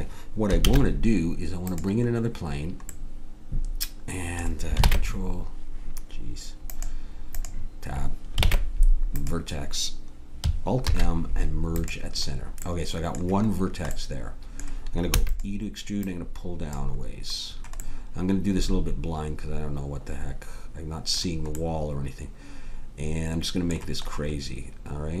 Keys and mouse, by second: 0.6 shift+a, 2.2 middle click, 4.8 ctrl+Tab, 7.4-8.6 drag, 8.4 ctrl+Tab, 10.8 alt+m, 12.3 click, 15.1 e, 21.7-22.7 middle drag, 23.6-25.2 middle drag.